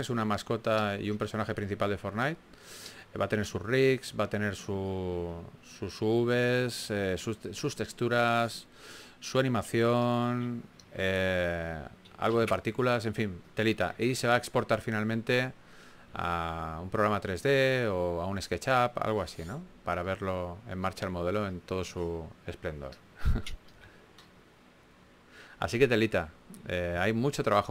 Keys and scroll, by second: 2.4-3.2 typing, 5.4 typing, 7.5 typing, 11.2 typing, 12.7 super+z, 13.1 4, 14.1-15.4 typing, 16.4 typing, 24.9 typing, 26.5 super+z, 27.4-27.7 typing.